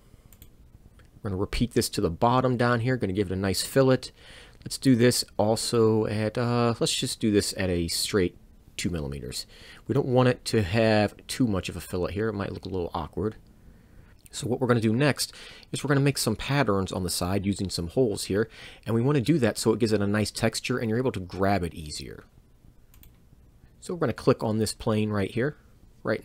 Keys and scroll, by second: 2.2 f, 12.0 Return, 23.0 Escape, 23.0 c, 25.8 c.